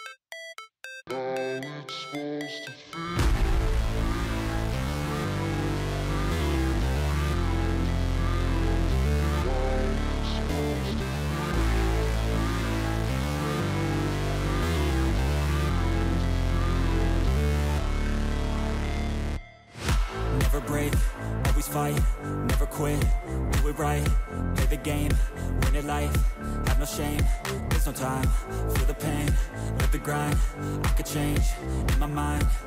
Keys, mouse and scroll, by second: 10.4 ctrl+a, 16.1 ctrl+d, 17.0 shift+click, 20.9 double click, 30.7 f, 31.1 a.